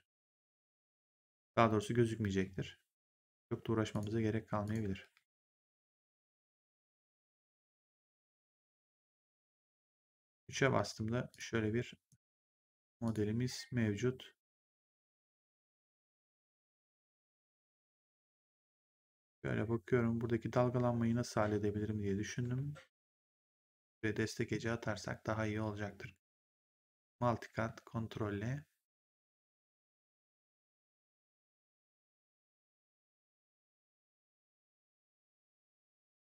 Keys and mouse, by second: 0.3 click, 2.1 w, 3.8 click, 4.9 w, 6.1 click, 7.1 w, 9.7 right click, 10.2 3, 11.2 click, 12.0 right click, 13.0 click, 15.4 click, 16.1 1, 20.4 3, 22.4 1, 23.3 click, 23.5 1, 26.9 click, 29.8 ctrl+click, 33.6 ctrl+click, 34.0 w, 34.3 right click, 34.8 3, 35.4 click.